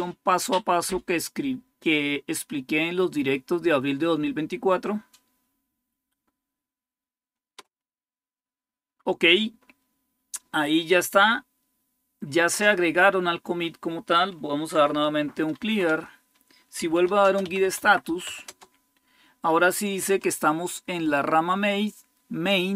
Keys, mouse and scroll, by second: 14.4-18.5 typing.